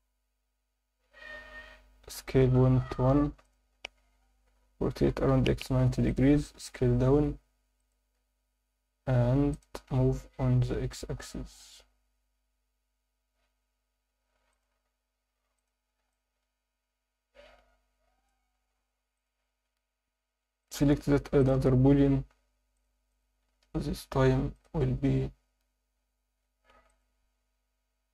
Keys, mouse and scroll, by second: 0.7 scroll down 7, 2.1-2.5 scroll down 1, 2.1 s, 2.5 ., 2.9 1, 3.4 click, 3.7 scroll up 1, 5.0 scroll up 3, 5.0-6.5 typing, 6.0 click, 7.8 click, 8.1-8.8 scroll up 1, 9.0 s, 9.5 click, 9.9 g, 10.5 x, 14.5 click, 14.8 s, 15.5-16.0 drag, 16.1-18.2 alt+middle drag, 18.6-19.1 scroll up 1, 19.1 click, 20.6-22.0 drag, 22.7 click, 23.1-25.8 right drag, 25.8 Tab, 26.0 scroll up 1, 26.7 ctrl+r.